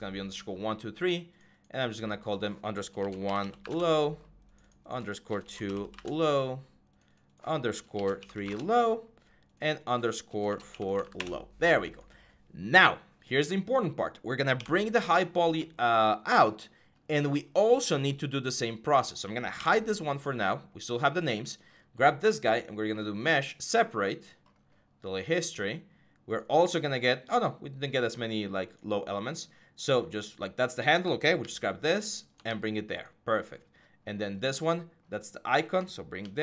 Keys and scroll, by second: 2.8-3.9 typing, 5.4-6.3 typing, 7.9-8.8 typing, 10.3-11.3 typing, 14.4 h, 19.4 h, 31.2 ctrl+c, 32.3 ctrl+v, 36.0 ctrl+c.